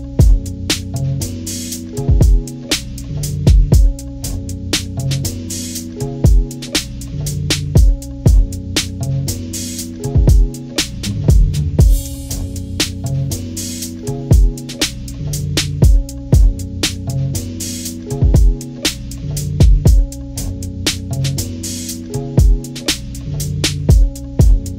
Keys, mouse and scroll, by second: 0.6 Delete, 1.9 ctrl+-, 2.6 scroll up 2, 3.4 ctrl+=, 3.8 ctrl+=, 4.8 ctrl+scroll up 2, 8.8 ctrl+z, 9.6 click, 11.2 Delete, 12.3 click, 12.6 Delete, 14.0 click, 14.2 Delete, 15.6 ctrl+-, 16.2 scroll up 2, 16.6 ctrl+=, 22.1 click, 22.3 click, 23.2 click, 24.2 click.